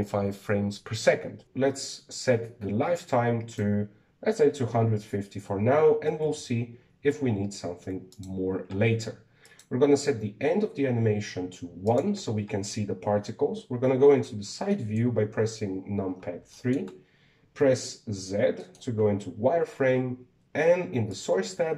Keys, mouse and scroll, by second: 3.8-6.9 drag, 7.0 BackSpace, 7.2 BackSpace, 10.2-12.8 drag, 14.3 KP_3, 15.5-16.9 shift+middle drag, 16.9 scroll up 3, 17.3 shift+middle click, 17.6-18.4 scroll up 3, 18.4 z, 19.4 shift+middle click, 19.7-21.2 scroll up 1, 21.2 scroll up 1.